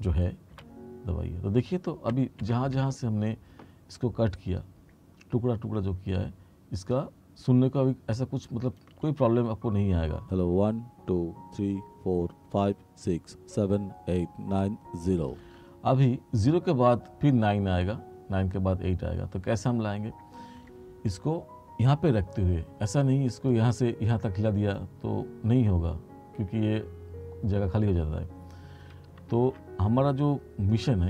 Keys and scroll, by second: 0.6 b, 2.2 r, 10.3 space, 15.5 space, 29.4 ctrl+z.